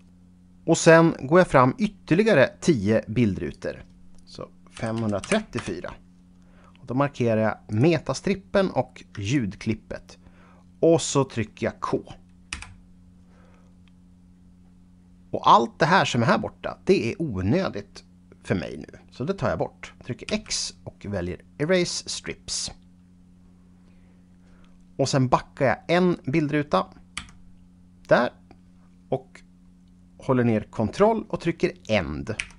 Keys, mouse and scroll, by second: 3.5 click, 4.7 KP_5, 5.5 Return, 7.7 click, 9.3 shift+click, 12.5 k, 14.1-15.9 scroll down 6, 16.5-18.2 scroll up 1, 20.3 x, 21.6 click, 23.3-24.4 scroll up 5, 27.1 Left, 32.4 ctrl+End.